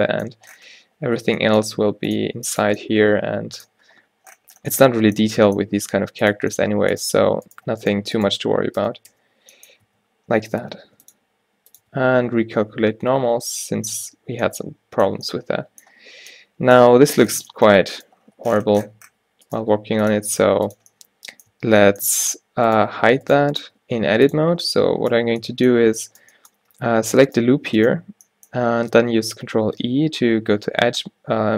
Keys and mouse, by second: 1.4 e, 2.4 g, 5.4 g, 7.6-9.7 drag, 8.9 f, 9.2 f, 10.9 ctrl+r, 11.9 a, 12.1 a, 13.3 ctrl+n, 13.9 a, 14.2 Tab, 18.0 Tab, 19.6-22.0 drag, 19.7 g, 20.6 g, 21.7 Tab, 22.3 Tab, 24.0 g, 25.3-31.4 drag, 29.9 ctrl+e.